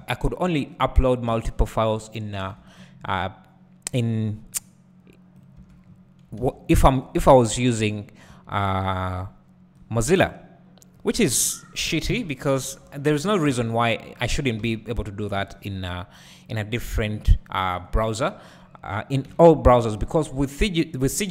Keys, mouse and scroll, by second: 0.0 `, 1.3 Tab, 2.4 3, 2.8 click, 5.4-7.9 drag, 5.6 Tab, 5.8-6.9 scroll down 2, 6.9 Tab, 7.4-7.9 scroll up 2, 8.3 `, 9.8-14.6 drag, 11.4-12.1 scroll down 2, 12.1 KP_1, 12.6 1, 12.9-14.3 scroll down 2, 14.6 alt+a, 16.4 b, 17.0 KP_Decimal, 17.7-18.9 scroll down 2, 18.9-21.3 drag, 20.2-21.1 scroll down 2, 21.1 scroll down 1.